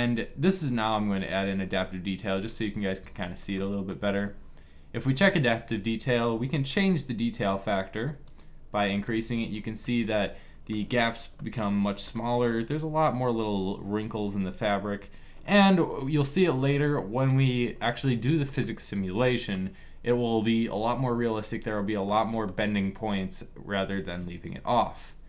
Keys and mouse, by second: 2.1-3.3 drag, 3.3-7.9 middle drag, 7.9-9.5 drag, 9.5 middle click, 9.6 click, 9.8 middle click, 17.3 middle click, 18.1 middle click, 18.8 middle click, 21.8 middle click, 22.0-25.2 middle drag.